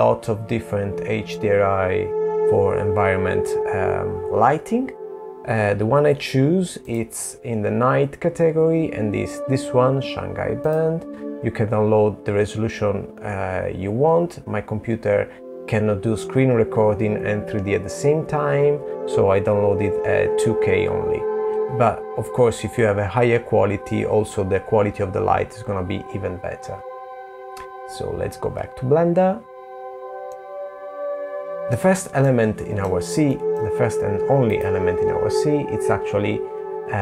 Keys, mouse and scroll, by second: 27.8 middle click, 29.7 middle click, 30.8 middle click, 32.0 click.